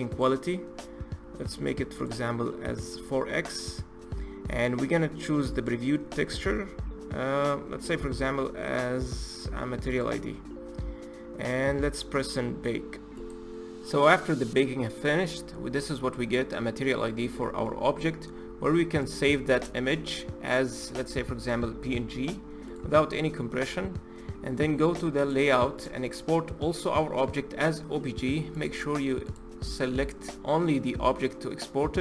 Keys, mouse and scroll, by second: 13.2 click, 20.3-25.0 drag, 25.9 click.